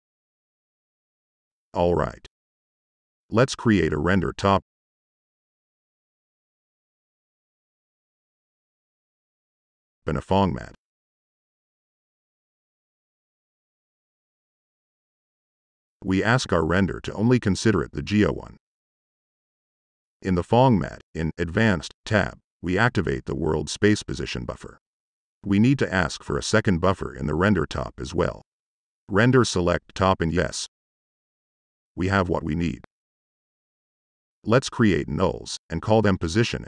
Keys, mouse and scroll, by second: 0.0 right click, 0.8 right click, 0.9 click, 1.6 middle click, 1.7 click, 2.0-2.8 typing, 2.7 click, 4.0 drag, 9.1 click, 9.8 click, 9.9 Tab, 10.1-11.6 typing, 12.0 click, 14.3 click, 14.7 drag, 17.5 drag, 22.7 click, 27.6 click, 29.0 click, 29.1 Tab, 29.2-30.2 typing, 30.3 click, 31.1 drag, 31.4 click, 31.8 click, 33.9 drag, 34.7-35.5 typing, 35.5 click, 36.0 click, 36.4 click.